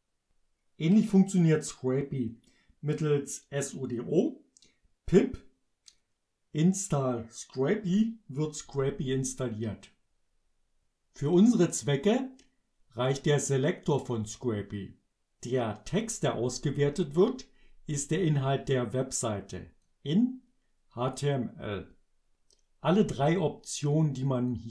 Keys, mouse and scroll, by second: 8.7 Return, 11.9-13.3 drag, 15.7-18.2 drag, 19.9-21.4 drag, 24.6-24.7 drag.